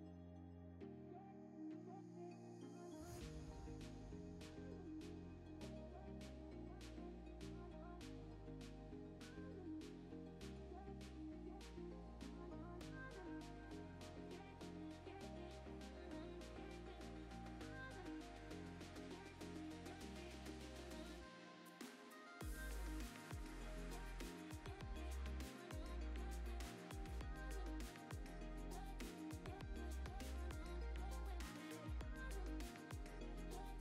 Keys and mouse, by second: 0.2 KP_7, 0.7 alt+d, 1.1 alt+d, 1.4 click, 1.5-3.5 typing, 1.6 middle drag, 2.5 click, 3.5 click, 4.5 middle click, 5.1 KP_0, 5.7 click, 6.2 g, 6.2 z, 7.0 shift+right click, 7.1 shift+a, 8.8 Tab, 9.1 e, 9.9 a, 10.0 s, 10.2 shift+z, 10.9 Escape, 11.4-12.9 typing, 11.5 click, 12.0 Tab, 12.4 alt+d, 12.8 click, 13.1 click, 13.3 shift+click, 13.7 drag, 14.2 click, 14.3 right click, 14.9 shift+click, 16.2 alt+shift+d, 16.2 shift+z, 16.6 click, 16.8 s, 17.1 click, 17.2 s, 17.7 click, 18.1 alt+d, 18.2 shift+z, 19.3 s, 19.8 s, 19.9 z, 21.0 shift+right click, 21.1 shift+a, 24.2 click, 25.0 Tab, 25.2-29.6 typing, 25.4 KP_Enter, 25.5 Tab, 25.6 right click, 26.4 click, 27.2 alt+d, 27.7 click, 28.6 click, 29.4 click, 29.6 alt+d, 30.8 click, 31.1 click, 31.3 g, 31.7 click, 32.8 space, 33.0 shift+s, 33.2 shift+a.